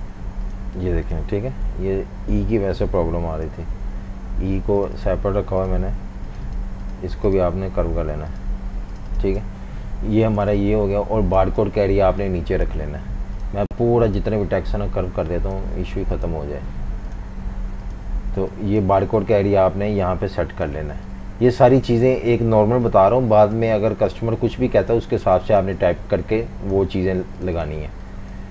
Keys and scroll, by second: 1.1 super+g, 1.9 super+3, 2.9 alt+super+3, 3.5 typing, 9.4 super+-, 9.6 super+-, 9.8 super+-, 10.5-11.5 typing, 20.8-22.4 typing, 25.2 v, 25.3 space.